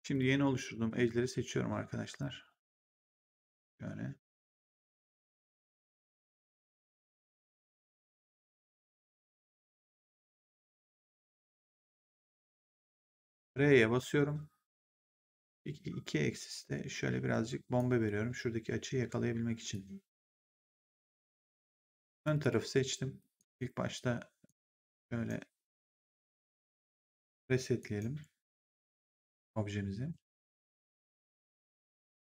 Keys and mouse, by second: 0.0 click, 2.0 shift+click, 4.5 shift+click, 7.3 shift+click, 12.0 shift+click, 13.4 r, 15.5 click, 19.6 click, 21.3 right click, 22.1 click, 23.3 right click, 24.4 right click, 27.0 click, 27.7 right click, 28.4 click.